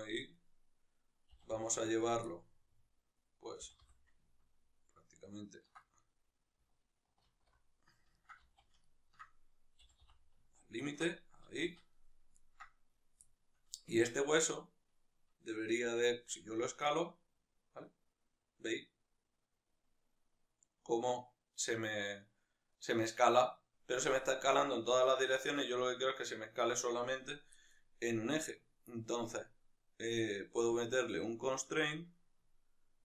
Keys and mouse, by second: 0.3-1.4 right drag, 1.4 g, 2.1 click, 2.3-11.0 middle drag, 3.6 g, 7.5 alt+o, 8.4 z, 9.9 g, 11.0 ctrl+click, 11.2-13.0 middle drag, 11.6 z, 13.0 right click, 13.3-14.6 shift+middle drag, 14.2 Tab, 14.6-15.9 right drag, 15.9 s, 22.9 right click, 24.2 s, 25.2 right click.